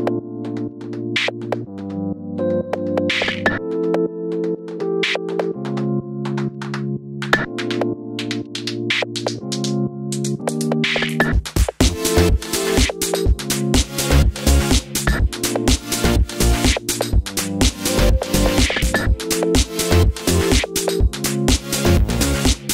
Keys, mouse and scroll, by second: 0.8 click, 1.3 shift+click, 1.8 m, 2.8 click, 3.4 click, 3.6 click, 3.9 m, 6.2 click, 8.6-9.1 middle drag, 8.6 scroll down 2, 9.1 click, 9.8 m, 10.4 click, 10.7-18.3 middle drag, 14.0 scroll down 1, 14.3 KP_0, 14.7-15.0 scroll up 1, 15.0 scroll down 1, 15.7 s, 18.3-21.9 drag, 19.7 s, 22.1 g.